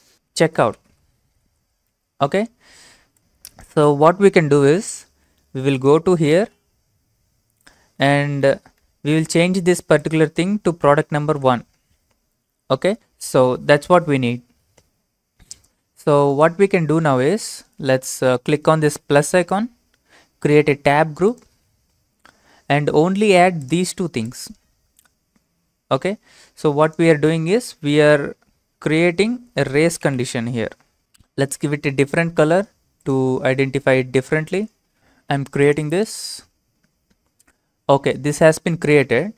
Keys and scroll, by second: 0.0-2.0 typing, 11.3 1, 12.9 alt+Tab, 29.6-30.1 typing.